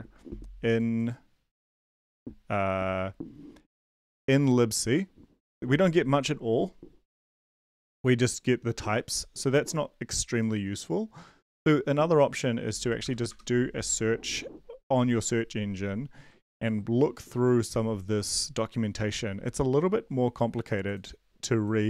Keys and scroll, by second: 13.0 ctrl+v, 13.3 Return.